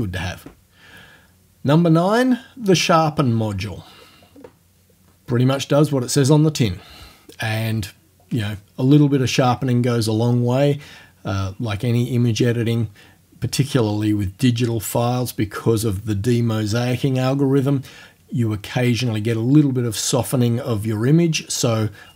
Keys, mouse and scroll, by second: 4.3 scroll down 1.